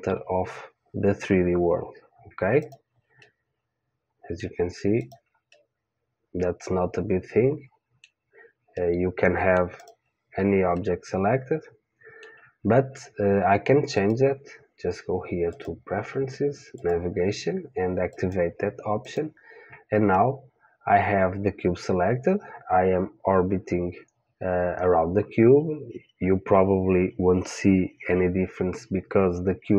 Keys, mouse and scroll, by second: 2.6 click, 3.4 middle click, 4.6 middle click, 5.0 click, 5.5 middle click, 7.0 middle click, 8.3-11.0 middle drag, 9.8 click, 11.7-12.7 middle drag, 13.9-16.7 drag, 20.1-22.2 middle drag.